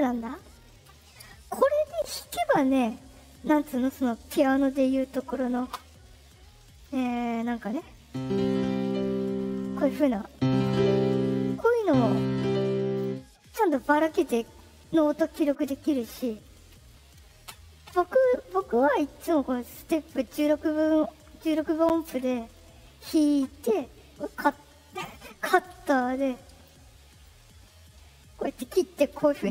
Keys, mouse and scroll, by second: 6.6 click, 14.9 middle click, 18.5 click, 19.7 click, 21.0 middle click, 22.2 middle click, 22.7 middle click, 24.3 click, 24.8 click, 25.6-26.6 drag, 27.2-28.5 drag.